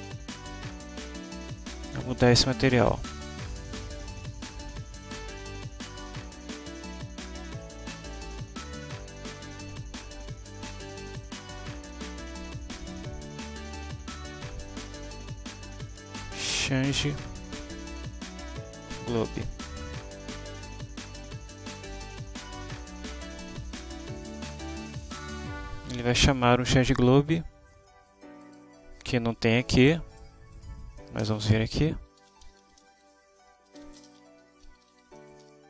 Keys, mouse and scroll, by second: 5.0 click, 6.8 click, 7.5 click, 9.2 click, 11.2 click, 12.2-14.1 typing, 16.7-18.9 typing, 19.6 Right, 20.0 Left, 21.2 Home, 22.8 shift+Return, 28.5 click, 30.2 click, 30.6 click, 31.3 Return, 31.6 Up, 32.0-35.6 typing.